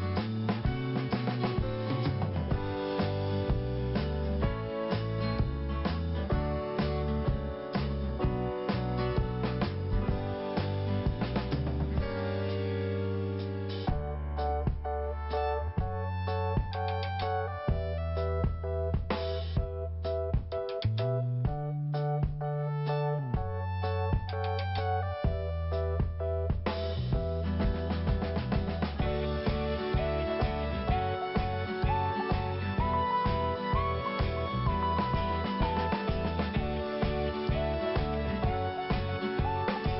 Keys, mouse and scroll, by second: 2.1 click, 2.2 click, 6.4 click, 6.5 click, 6.6 click, 6.7 click, 7.4 scroll down 1, 8.1 scroll up 1, 10.0 click, 10.1 click, 12.4 click, 12.5 click, 12.6 click, 12.6 click, 14.2 click, 14.3 click, 16.3 click, 16.4 click, 18.1 click, 18.2 click, 19.9 click, 21.3 click, 21.9 click, 21.9 click, 31.4 scroll down 1, 32.5 scroll up 1, 33.2 right click, 33.3 scroll up 1, 33.4 right click, 33.5 right click, 34.5 click, 35.2 scroll up 1, 36.2 click, 36.2 click, 37.6 click, 37.7 click, 38.3 click, 38.4 click.